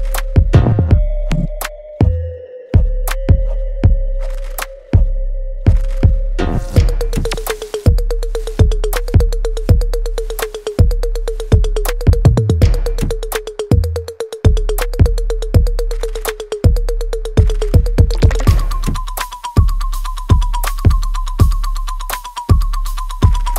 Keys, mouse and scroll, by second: 1.5 alt+right click, 2.0 click, 2.4 middle click, 2.8-4.6 alt+right drag, 4.6 alt+right click, 5.4-8.8 alt+drag, 8.8-12.3 alt+right drag, 12.9-14.3 alt+drag, 14.3 click, 14.6 right click, 14.6 alt+right click, 15.2 alt+click, 16.5 alt+right click, 17.2 alt+middle click, 17.7-19.6 alt+drag, 19.6 alt+click, 20.3 alt+right click, 20.7 alt+click, 21.0 alt+middle click, 21.6 alt+right click, 22.2 alt+click, 22.6 alt+middle click, 23.1 alt+click.